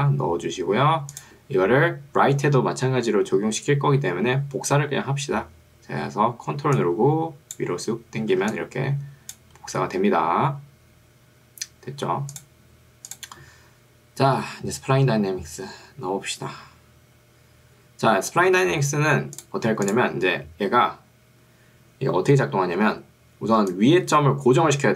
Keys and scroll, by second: 8.5 ctrl+2, 11.3 Escape, 22.9 ctrl+2.